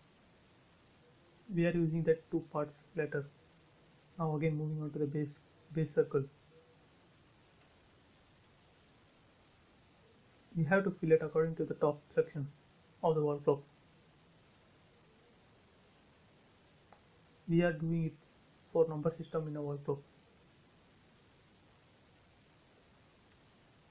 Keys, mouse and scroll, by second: 1.5 scroll down 1, 1.7 middle click, 2.4-2.8 scroll up 1, 2.9-3.5 scroll up 1, 3.6 shift+middle click, 4.3 scroll down 1, 6.6 f, 7.2 space, 7.4 scroll up 1, 9.2 click, 9.9-10.2 scroll down 1, 12.1 click, 12.2 space, 12.3-13.7 scroll down 1, 13.7 scroll up 1, 14.5 scroll down 1, 14.7 middle click, 15.7 ctrl+z, 16.0-16.4 scroll up 1, 16.4 middle click, 17.3-17.7 scroll up 1, 17.7 f, 18.3 click, 20.5-21.4 scroll up 1, 21.4 click, 21.6 space, 22.0-23.9 middle drag.